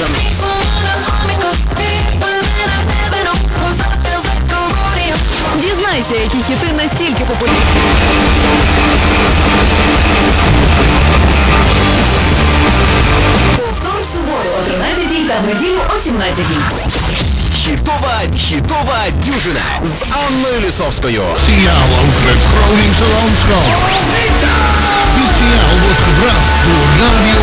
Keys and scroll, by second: 13.5 Page_Down.